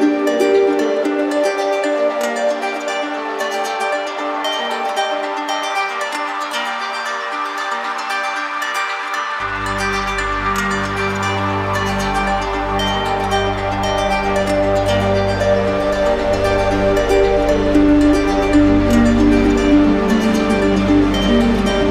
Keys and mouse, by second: 0.7 right click, 2.7 click, 3.9 click, 5.8 click, 6.6 click, 7.5 click, 9.2 right click, 10.3 right click, 11.4 click, 13.8 click, 15.3 right click, 17.6 right click, 18.7 alt+right click, 20.7 alt+right click, 20.9 ctrl+d.